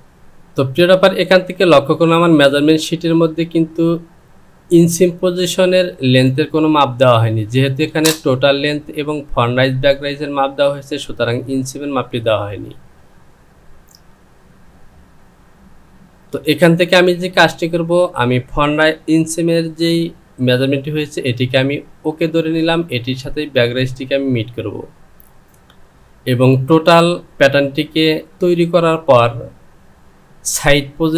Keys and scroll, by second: 19.9 Home.